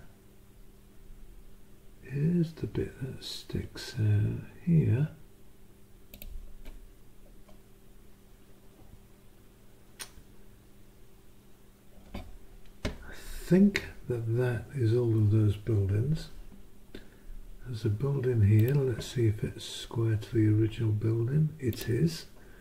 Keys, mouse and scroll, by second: 6.1 click, 15.3-16.5 drag, 18.6 click, 21.7 click.